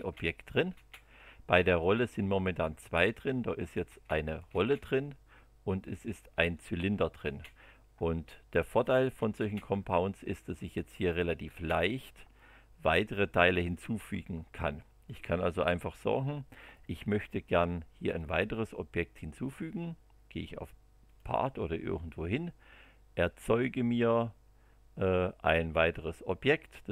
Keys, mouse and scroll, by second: 0.7 space, 1.8 click, 2.9 click, 3.6 click, 3.8 space, 4.2 click, 5.7 click, 6.3 space, 7.2 space, 8.9 click, 9.3 space, 11.0 click, 11.4 space, 12.3-13.6 drag, 15.8 KP_2, 18.1 click, 21.0 click, 25.8 click.